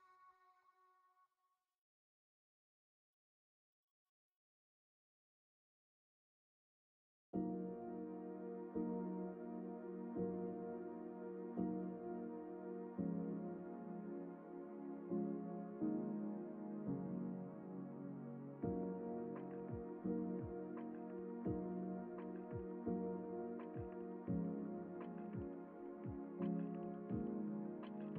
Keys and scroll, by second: 3.4 ctrl+alt+r, 15.4 2, 28.0 space.